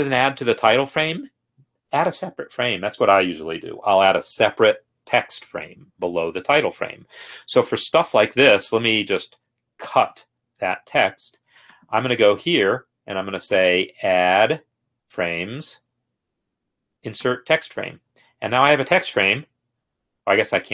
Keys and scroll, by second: 10.1 ctrl+x, 19.5 ctrl+v.